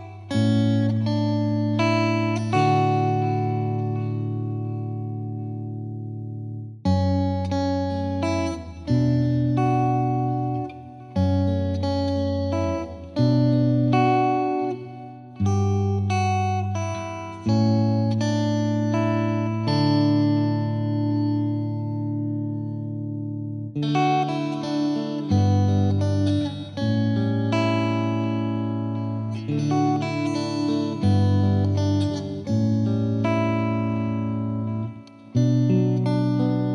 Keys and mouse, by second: 0.0 F2, 1.3 click, 6.8 click, 10.3 right click, 10.3 click, 12.2 click, 13.0 click, 13.8 click, 14.4 click, 16.0 click, 17.0 0, 17.4 Return, 18.7 click, 20.7 click, 23.0 right click, 23.1 click, 28.3 click, 32.2 right click, 32.4 click, 33.0 click, 34.7 click.